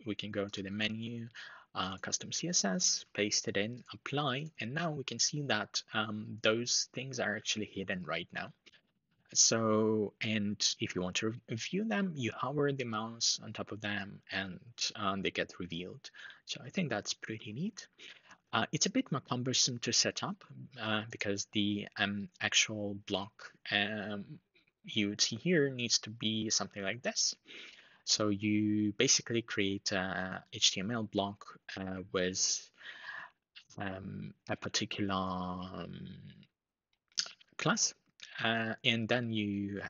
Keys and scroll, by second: 2.7 super+v.